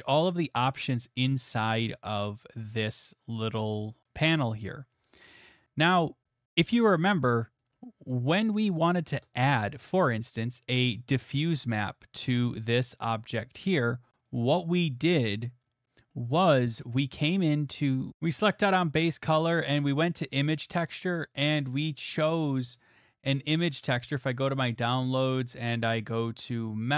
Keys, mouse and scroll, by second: 4.9 scroll, 6.4-6.8 scroll, 7.2 shift+middle click, 7.7 middle click, 9.2 click, 10.0 middle click, 10.9 middle click, 11.0 middle click, 11.9 middle click, 13.2 shift+middle click, 13.8 middle click, 15.2 middle click, 15.8 middle click, 16.3 click, 16.9 click, 18.1 click, 18.3 click, 20.3 click, 22.2 click, 24.0 click, 24.6 middle click, 24.6 middle click, 25.0 middle click, 25.3 middle click, 25.3 middle click, 25.3 middle click, 26.6 click, 26.7 click.